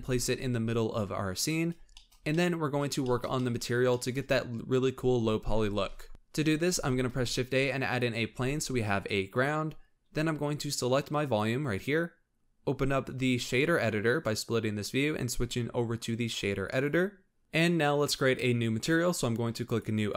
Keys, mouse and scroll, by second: 1.9-6.6 shift+middle drag, 6.6 shift+a, 8.3 s, 10.5 click, 11.2 click, 12.9-17.3 drag, 19.6-20.1 drag.